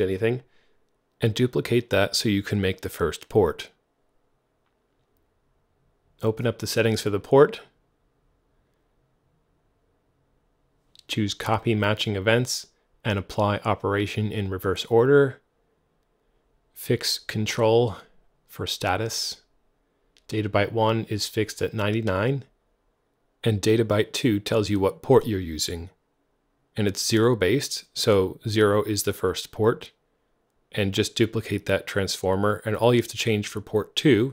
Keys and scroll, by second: 3.6-4.8 typing, 22.1-22.4 typing, 26.7 super+w, 31.6 Right, 31.9 BackSpace, 32.0 2, 32.2 Return.